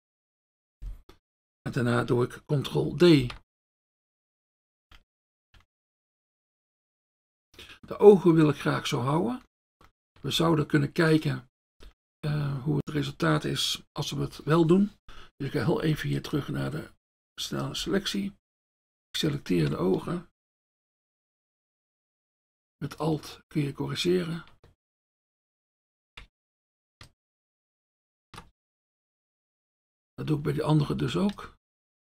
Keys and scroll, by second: 3.2 ctrl+d, 16.2 F1.